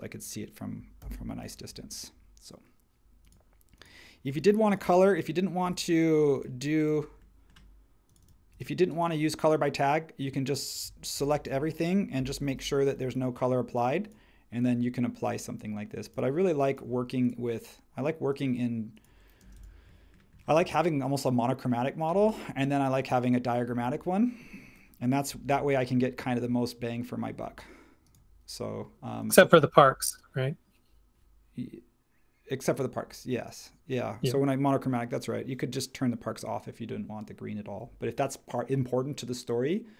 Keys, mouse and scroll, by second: 1.0 h, 1.7 space, 11.1 super+g, 12.5 b, 19.4 space, 25.4 super+1, 29.5 space.